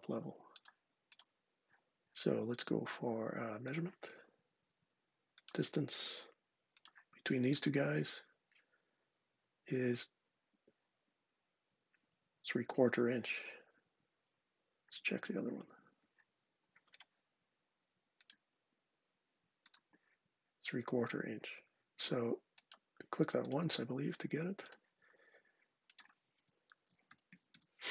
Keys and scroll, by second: 25.9-27.8 typing.